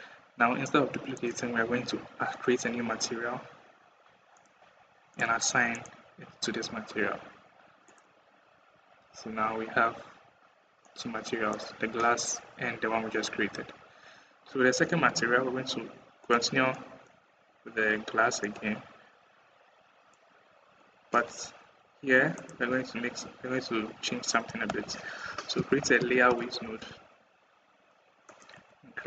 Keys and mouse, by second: 0.5 middle click, 4.1 middle click, 5.6 middle click, 8.8 Tab, 10.6 click, 16.0-16.8 drag, 18.2-19.9 drag, 21.2 KP_1, 22.3 KP_1, 23.0 KP_1, 24.5 shift+a, 28.5 shift+a.